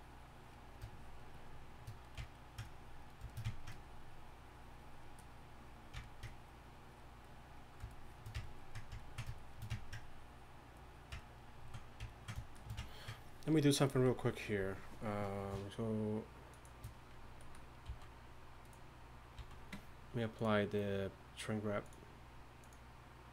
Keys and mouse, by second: 18.6 z, 19.3 z.